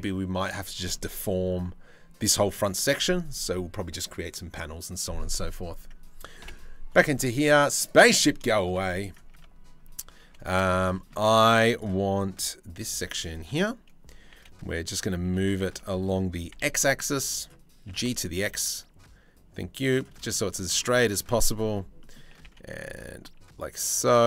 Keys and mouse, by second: 0.5-1.1 middle drag, 6.0 KP_7, 7.4 click, 8.1 shift+middle drag, 8.4 z, 9.0 Tab, 9.8 1, 10.5 shift+middle click, 12.5 c, 13.9 g, 17.5 g, 22.1 g.